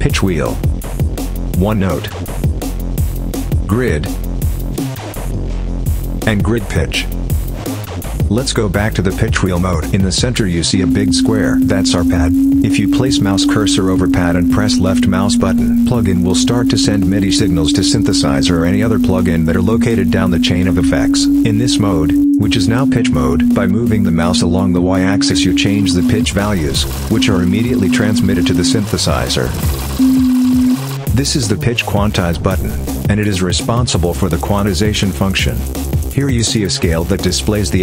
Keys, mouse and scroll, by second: 1.4 click, 3.5 click, 6.1 click, 8.1 click, 10.5-25.6 drag, 26.4 click, 27.1-28.8 drag, 29.9 click, 30.0-30.7 drag.